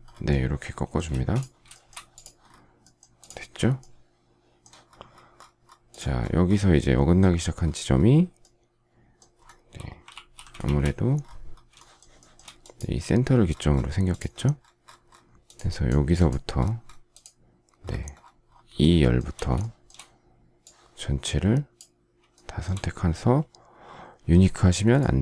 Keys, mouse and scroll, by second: 1.0 space, 1.8 shift+double middle click, 10.1 alt+f, 10.6 shift+z, 11.7 shift+middle click, 12.2 shift+middle click, 18.8 shift+middle click, 19.6 shift+middle click, 22.3 shift+middle click.